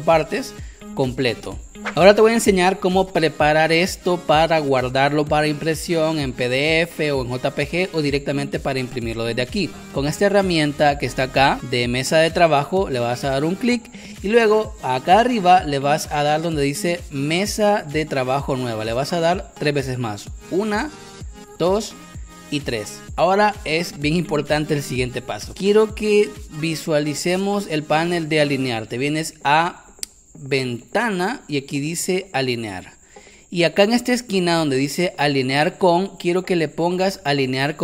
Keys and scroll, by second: 0.5 space, 1.4 space, 23.0 space.